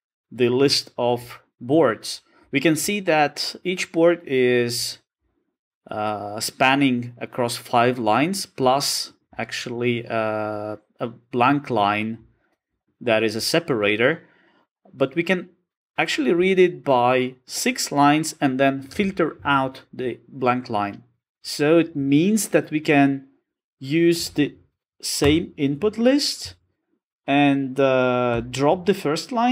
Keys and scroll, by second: 21.2 Return, 25.2 Return, 27.9 Return.